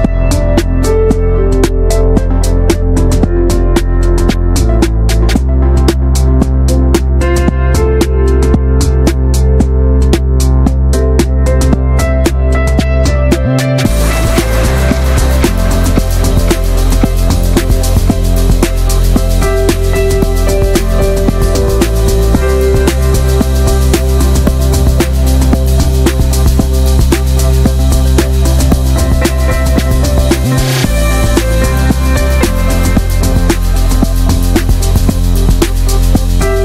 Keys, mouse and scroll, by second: 0.4 click, 0.9 s, 4.2-6.3 alt+shift+drag, 6.3-6.7 middle drag, 6.7 ctrl+b, 8.4 middle click, 8.7 e, 10.7 Tab, 10.8 scroll down 1, 11.0 middle click, 11.1-11.9 scroll up 2, 11.2 Tab, 11.4 shift+middle click, 11.9 middle click, 12.2 ctrl+z, 12.4 middle click, 12.7 ctrl+z, 13.3 middle click, 13.4 ctrl+z, 15.8 scroll down 2, 16.1 middle click, 16.2-16.6 scroll up 3, 16.6 middle click, 16.9 ctrl+z, 17.1 scroll down 1, 17.2 middle click, 17.6 alt+s, 19.1 middle click, 19.3 2, 19.5-20.5 drag, 20.5 shift+middle click, 21.1 alt+shift+click, 21.9 ctrl+b, 23.2 Tab, 23.3 scroll down 4, 23.5 middle click, 24.1 ctrl+s, 24.3 middle click, 24.4-25.0 scroll up 2, 24.5 Tab, 24.6 click, 25.0 middle click, 25.3-26.3 shift+middle drag, 26.3 3, 26.6-27.8 middle drag, 27.8 click, 28.5-29.2 middle drag, 29.2-29.7 drag, 29.7-30.0 middle drag, 31.3-31.8 middle drag, 32.8 click, 33.8 middle click, 34.1 ctrl+b, 36.3 middle click.